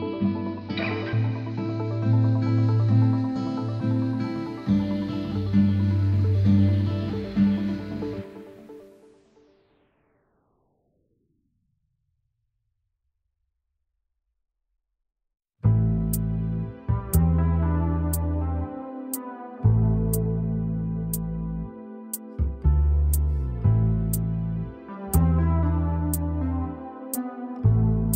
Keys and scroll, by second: 7.0 ctrl+z.